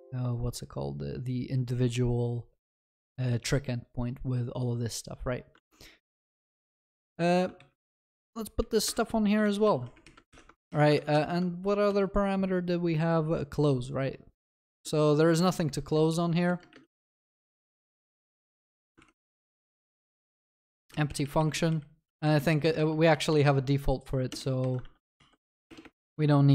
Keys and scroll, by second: 5.6 ctrl+Tab, 9.4 ctrl+v, 9.7 ctrl+s, 10.3 ctrl+y, 11.9 ctrl+s, 11.9 ctrl+b, 13.4 ctrl+alt+Left, 15.4 Return, 18.6 ctrl+s, 19.0 ctrl+shift+Left, 20.8 ctrl+c, 23.1 ctrl+w, 26.1 ctrl+s.